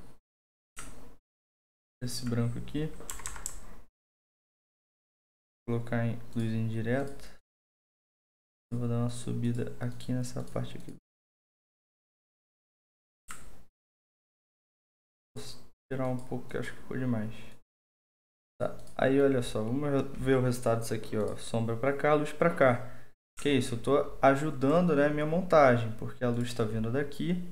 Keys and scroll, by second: 1.9-3.4 typing, 8.7 typing.